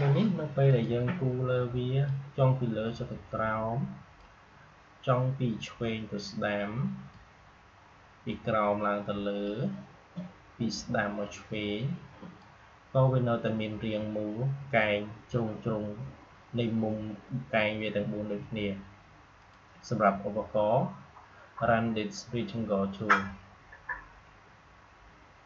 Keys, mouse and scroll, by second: 0.6-14.9 drag, 19.3 click.